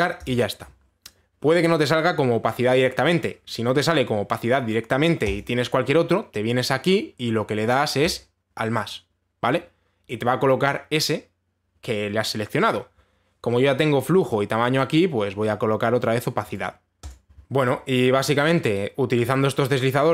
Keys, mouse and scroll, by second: 0.9 click, 6.0 click, 8.7 click, 13.3 click, 17.1 right click.